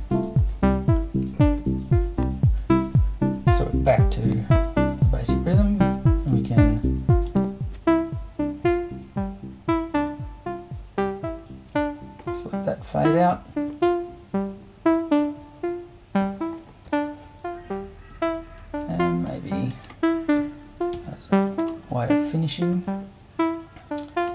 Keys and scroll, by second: 19.0 super+2, 20.4 4, 20.9 8.